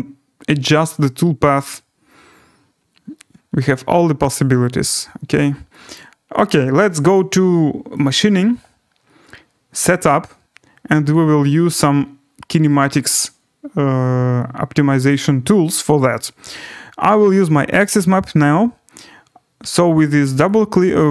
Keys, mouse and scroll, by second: 5.9 click, 7.1 click, 8.0 click, 9.9 click, 11.1-12.1 scroll, 17.1 click, 20.5 click.